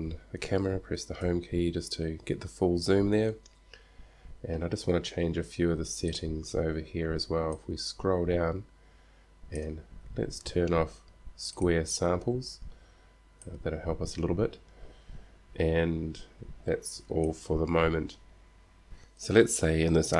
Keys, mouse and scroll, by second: 1.5 Home.